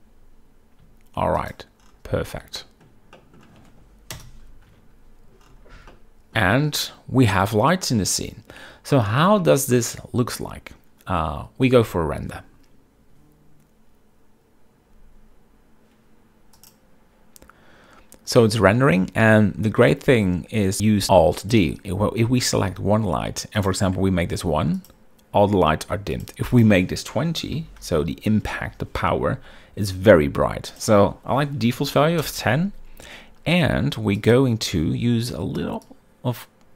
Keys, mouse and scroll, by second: 2.7 shift+middle drag, 3.3 middle drag, 4.2 KP_0, 4.8 z, 6.0-6.5 shift+middle drag, 9.5-9.9 shift+middle drag, 11.8 z, 19.9-20.9 shift+middle drag, 21.9 click, 24.1-25.3 drag, 26.7-29.0 drag, 31.4-32.7 drag, 34.8 click.